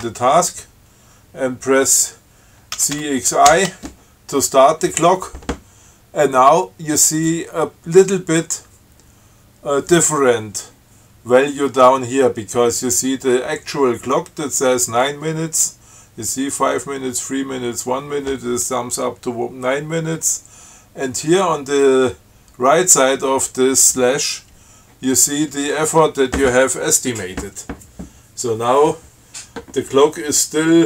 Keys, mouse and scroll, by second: 3.0 ctrl+c, 3.3 ctrl+x, 3.8 ctrl+i.